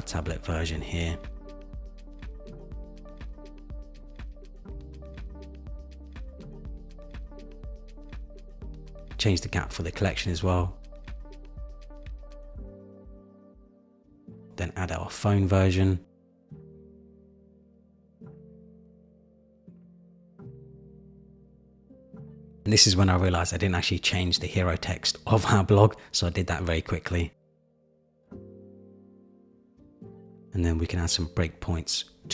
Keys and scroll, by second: 2.1 Return, 5.0 Return, 7.8 super+=, 11.5 shift+Down, 12.8 shift+Up, 24.3 super+v, 24.5 super+v, 24.6 super+c, 24.8 super+a, 25.3 super+-.